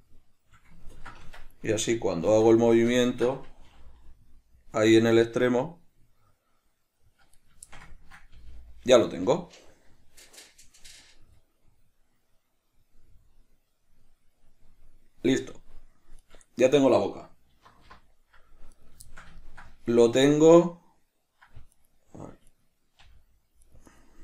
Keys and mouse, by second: 1.6 Tab, 1.6 middle click, 1.9 right click, 2.6 alt+q, 3.1-7.7 ctrl+shift+middle drag, 3.9 g, 7.7 right click, 8.0-16.6 ctrl+shift+middle drag, 8.6 g, 16.6 right click, 17.9 alt+g, 19.0 right click, 19.3-22.0 shift+middle drag, 22.0 right click, 22.8 right click, 23.2 g, 24.1 right click.